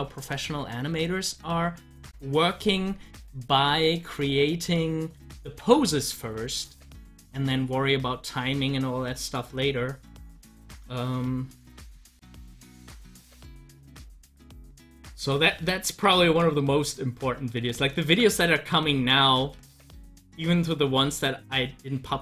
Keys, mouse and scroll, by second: 3.8-5.4 drag, 5.4 ctrl+z, 13.6 ctrl+z, 15.5 ctrl+z, 17.8 z, 18.5 click.